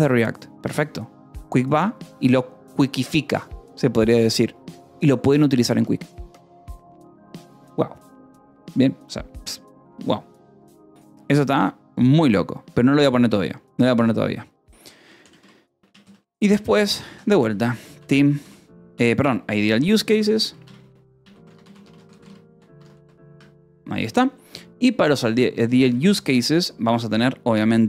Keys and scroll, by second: 13.5 Return, 15.1-23.5 typing, 23.2 Escape, 25.6 :, 25.8 space.